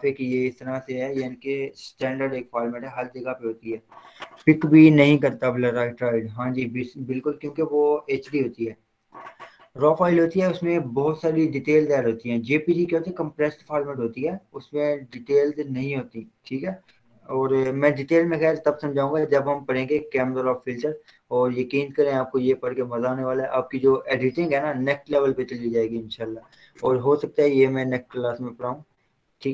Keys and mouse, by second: 19.0 click.